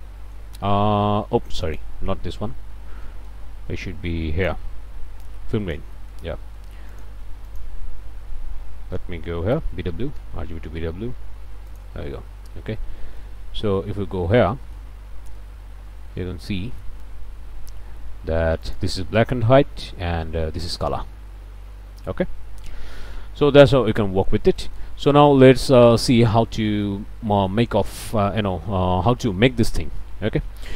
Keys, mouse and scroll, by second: 0.0 click, 1.6 ctrl+click, 2.6 ctrl+x, 3.1 ctrl+click, 3.8-6.3 drag, 6.6 click, 7.2 shift+a, 7.5 shift+click, 9.6 b, 9.7 w, 10.2 Return, 11.7 click, 12.4-13.0 scroll up 2, 13.0 click, 13.3 ctrl+space, 13.7 ctrl+scroll up 2, 14.1 scroll down 2, 14.5 middle click, 14.6 click, 14.9 scroll up 1, 15.5 ctrl+space, 16.1 ctrl+scroll up 3, 16.5 click, 18.6 click, 19.8 m, 20.9 m, 21.7 m, 22.7 m, 23.5-24.4 scroll down 2, 24.6 click, 25.0-26.4 scroll down 1, 26.4 click, 26.8 click, 28.1 click.